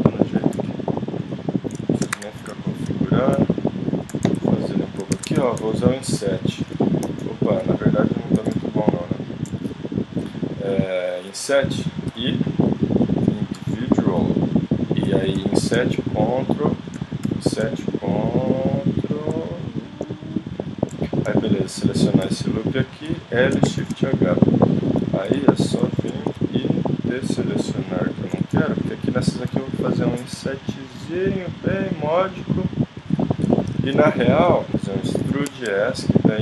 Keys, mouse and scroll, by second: 0.5 s, 1.3 click, 1.5 middle click, 2.2 KP_1, 3.4 s, 4.1 s, 5.2 ctrl+Tab, 8.3 g, 9.7-11.5 middle drag, 12.1 i, 14.9 click, 15.4 i, 17.2 i, 21.4 click, 22.2 h, 23.1 l, 23.8 shift+h, 25.2 KP_7, 26.0 z, 29.5 i, 33.3-34.4 middle drag, 34.7 s, 35.2 e.